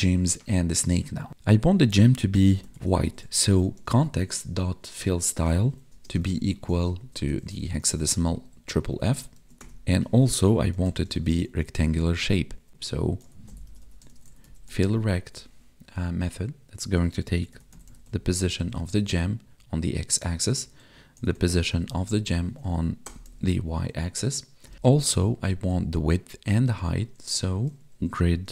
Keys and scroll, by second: 5.9 space, 6.1 space, 8.3 Right, 9.3 ctrl+s, 12.0 Tab, 18.9 space, 24.7 space.